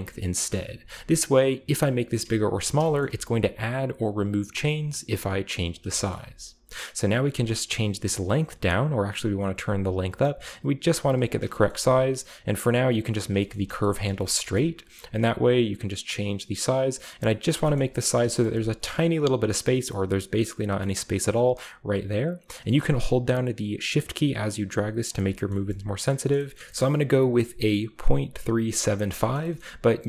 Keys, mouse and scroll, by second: 0.1 shift+middle click, 0.3-0.7 scroll down 1, 0.7 g, 2.6 shift+right click, 2.7 shift+middle click, 2.9-3.2 shift+scroll up 1, 3.2 g, 5.6-6.8 shift+middle drag, 6.4-7.3 scroll up 1, 7.6-11.4 shift+drag, 11.3-12.3 scroll down 1, 11.4 shift+middle click, 11.7 g, 12.6 click, 13.3 shift+middle click, 13.4-14.4 shift+scroll up 5, 14.0 shift+middle click, 14.2 shift+middle click, 14.5 shift+middle click, 15.4-17.2 shift+drag, 17.7 shift+middle click, 17.8-19.6 scroll up 2, 18.0 shift+middle click, 18.4-19.6 shift+middle drag, 19.8 shift+middle click, 21.3-23.3 shift+drag, 22.5 shift+right click, 23.3-25.0 shift+middle drag, 25.0 shift+click, 25.5-26.7 scroll down 2, 26.2 shift+middle click, 26.6 shift+middle click, 26.7-27.6 shift+scroll up 1, 29.0-29.6 scroll down 1, 29.1-30.0 shift+middle drag, 29.6-30.0 scroll up 2.